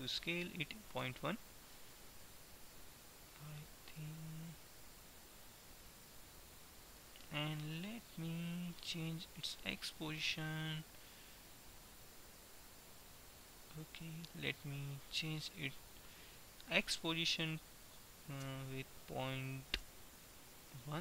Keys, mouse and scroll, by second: 4.0 middle click, 5.3-6.6 middle drag, 10.1-11.8 drag, 17.0 g.